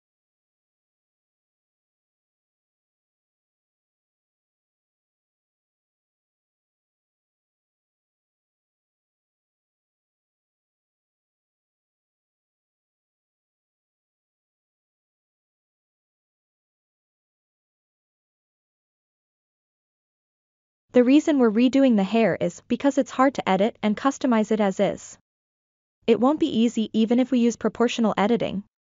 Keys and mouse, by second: 2.9-4.6 drag, 2.9 g, 7.0-8.2 drag, 8.8 a, 9.5 s, 10.1-12.1 drag, 13.0-14.8 ctrl+middle drag, 15.0 Tab, 15.6-16.0 shift+middle drag, 16.2 ctrl+middle click, 16.6 shift+middle drag, 17.3-18.4 ctrl+middle drag, 18.7 shift+middle click, 22.2-23.3 middle drag, 23.4 Tab, 23.9-24.5 ctrl+middle drag, 24.6 middle click, 25.4 middle click, 26.2 middle click, 28.3-28.7 ctrl+middle drag.